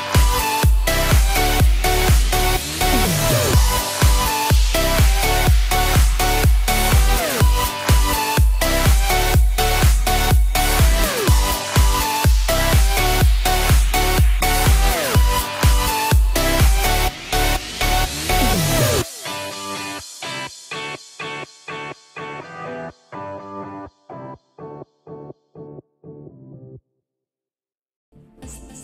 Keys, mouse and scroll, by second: 1.3 shift+click, 1.6 middle click, 2.7 shift+click, 3.3 middle click, 4.2 middle click, 5.9 click, 10.1 shift+click, 11.0 shift+click, 12.1 ctrl+c, 13.2 Up, 14.3 ctrl+v, 15.8 Down, 16.1 Down, 16.7 shift+space, 18.1 Escape, 18.5 ctrl+s, 21.0 click, 25.3 scroll down 3, 25.6 middle click, 26.0 scroll up 2, 27.1 middle click.